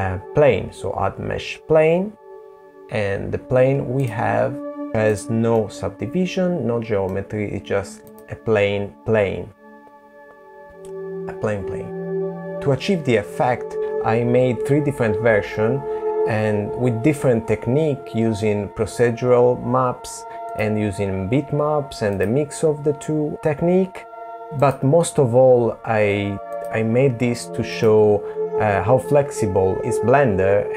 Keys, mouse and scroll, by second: 2.4 click, 2.5 click, 3.6 middle click, 4.9 click, 5.6 click, 18.2 click, 19.8 click, 23.3 click, 24.2 click.